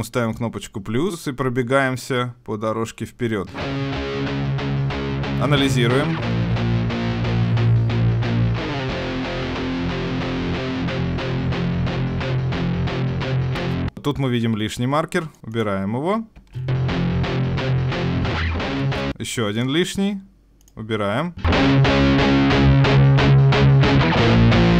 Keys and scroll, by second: 19.1 Escape.